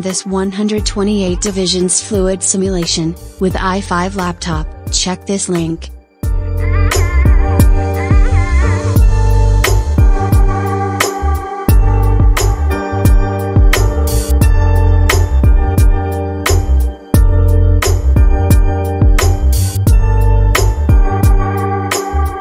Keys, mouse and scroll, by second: 14.7 space, 16.6-17.8 shift+middle drag, 17.8-18.4 scroll down 1, 18.4-18.8 scroll up 1, 20.3 click.